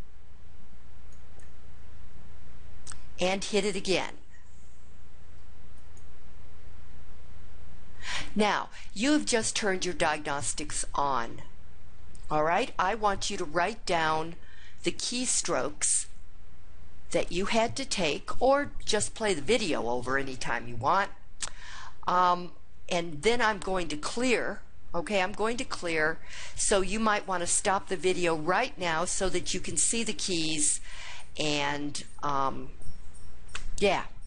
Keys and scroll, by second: 1.1 Return, 5.7 Return.